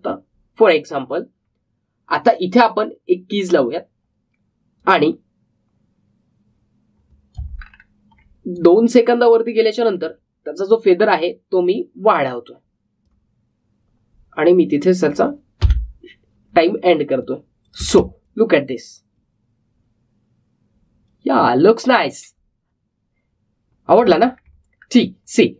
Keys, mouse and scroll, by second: 0.4 ctrl+z, 4.4-8.5 drag, 8.5-9.2 alt+scroll down 1, 9.4-16.6 drag, 16.6 n, 18.2 click, 18.7 space, 24.9 space.